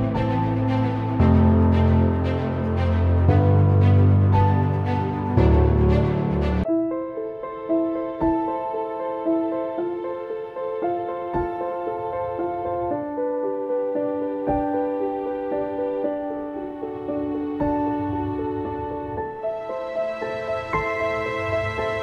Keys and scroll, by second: 0.2 e, 1.4 [, 5.7-6.4 typing, 14.4-15.8 typing, 18.9-19.9 typing, 21.4-22.0 typing.